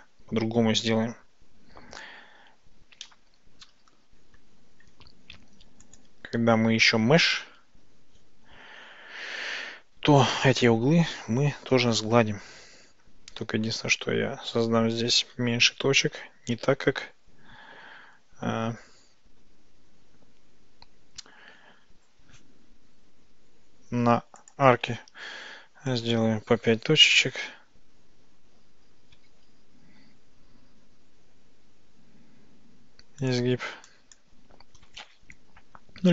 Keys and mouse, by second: 3.1-4.5 drag, 9.6 Tab, 10.5 click, 11.6 ctrl+shift+b, 24.4 click, 26.1 click, 27.4 ctrl+shift+v, 29.4 ctrl+shift+b, 33.3 click, 34.1 click, 35.1 ctrl+shift+b.